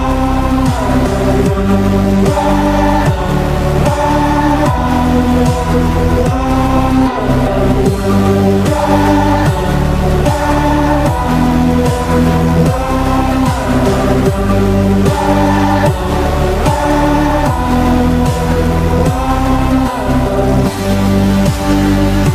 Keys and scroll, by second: 6.0 n, 6.0 Return, 10.4-12.4 typing, 18.8 9.